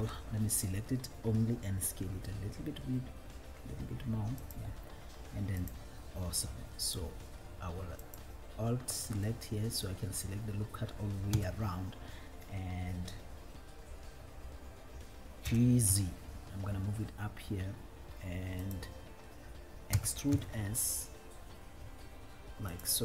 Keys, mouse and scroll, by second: 0.0 ctrl+l, 2.2 s, 4.7 click, 5.7 click, 6.8 click, 8.3 alt+click, 9.7 middle click, 11.6 KP_1, 15.6 g, 16.4 z, 18.9-20.2 drag, 20.2 e, 20.8 s.